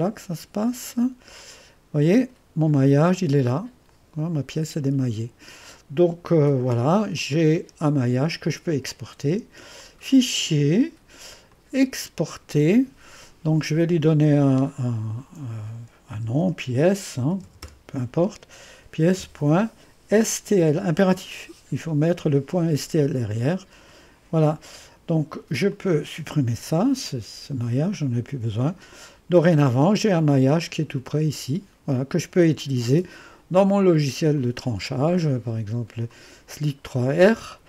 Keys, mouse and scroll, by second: 0.0 click, 1.4 click, 2.2 scroll up 1, 2.9-4.2 right drag, 6.4 shift+7, 7.2 click, 8.5 click, 9.8-10.9 drag, 11.5 click, 16.1-18.1 typing, 19.2-21.0 typing, 23.9 click, 24.4 click, 24.7 click, 25.7 click, 26.3 Delete, 30.2 click, 34.4 click, 34.6 click, 36.1 click.